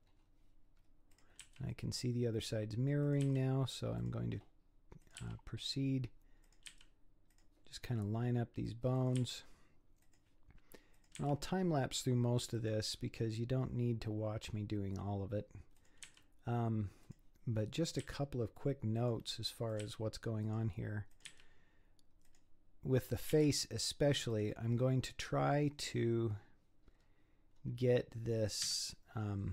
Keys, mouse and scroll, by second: 0.1 scroll up 6, 1.1 click, 1.4 g, 3.0 click, 3.2 g, 5.0 click, 5.2 g, 6.4 click, 6.7 g, 7.8-8.2 scroll down 5, 8.2-9.0 scroll up 2, 9.0 click, 9.2 g, 10.9 click, 11.2 g, 13.3 scroll down 3, 15.8 click, 16.1 g, 17.9 click, 18.0 g, 19.7 click, 19.8 g, 21.1 click, 21.3 g, 22.7-23.1 scroll down 1, 23.1 click, 23.3 g, 24.8 scroll down 4, 25.2-26.4 middle drag, 26.4-26.8 scroll up 3, 26.8-27.7 scroll down 8, 28.6 KP_3, 29.4 scroll down 6.